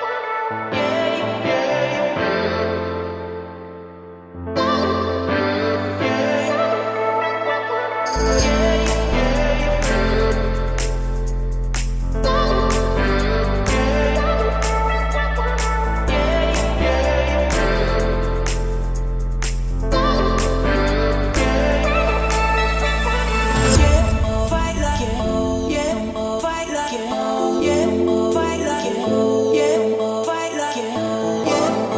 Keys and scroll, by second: 0.3 Escape, 3.6 Return, 7.5 Escape, 12.7 Escape, 16.6 o, 19.2 Escape, 23.3 Escape, 27.4 2, 27.7 Return, 29.5 1, 30.3 Return, 31.0 Escape.